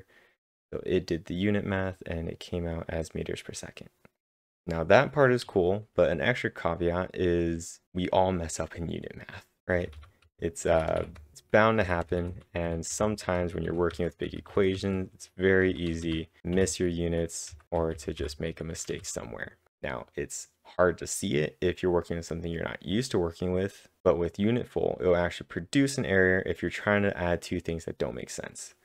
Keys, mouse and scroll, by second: 4.1 click, 4.3 typing, 9.6 click, 9.6-19.2 typing, 10.7 click.